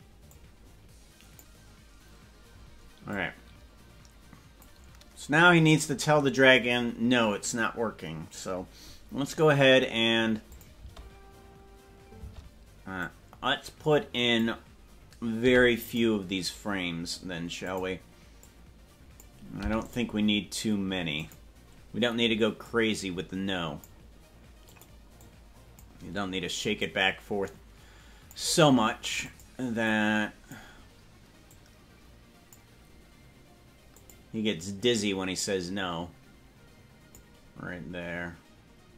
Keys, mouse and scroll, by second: 0.3-1.6 drag, 3.2-4.8 drag, 5.4-5.7 scroll up 5, 6.1 scroll down 2, 6.7 scroll down 7, 7.5 scroll, 9.3 scroll up 1, 10.6 click, 10.9 space, 12.5 space, 13.1-14.6 drag, 15.6 i, 17.7 click, 18.6 click, 19.7 i, 21.3 click, 22.6-24.0 drag, 24.8 click, 25.4 click, 26.8-28.5 drag, 29.4 click, 30.1 click, 31.5-32.7 drag, 34.1 click, 34.8-37.4 drag.